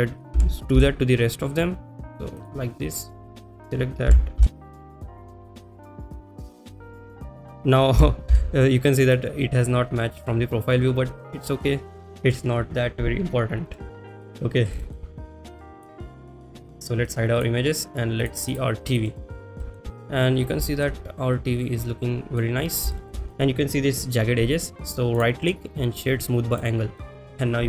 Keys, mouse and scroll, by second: 3.3 click, 4.7 click, 4.7 g, 4.7 z, 4.9 click, 5.6 click, 6.2 click, 6.7 click, 6.8 click, 7.3 click, 7.4 click, 13.8 middle click, 14.9 shift+middle click, 15.6 click, 16.1 middle click, 17.1 click, 17.4 click, 19.1 middle drag, 19.7 shift+middle drag, 19.9 click, 20.7 shift+middle drag, 21.4-22.4 middle drag, 23.0 shift+middle drag, 27.4-27.6 middle drag.